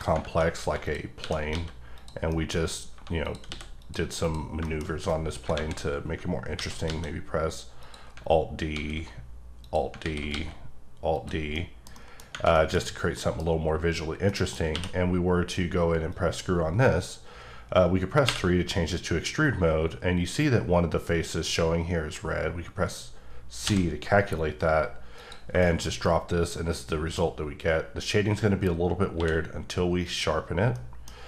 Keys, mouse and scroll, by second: 0.3 scroll down 1, 0.6 2, 0.8 click, 1.2 e, 1.5 x, 1.9 click, 2.3 middle click, 2.9 1, 3.2 click, 3.5 x, 3.8 click, 4.2 click, 4.6 shift+middle click, 5.5 KP_7, 6.5 alt+d, 6.9 x, 7.8 click, 8.7 alt+d, 9.6 click, 10.0 alt+d, 11.1 click, 11.4-11.9 scroll down 1, 11.9 middle click, 12.1 double middle click, 12.5 middle click, 13.1 middle click, 14.2 middle click, 14.7 q, 16.1 click, 18.2 3, 23.6 c, 25.1 click, 25.6 shift+middle click, 25.9-26.3 scroll up 1, 26.3 middle click, 29.1 q, 30.0 click, 30.7 middle click.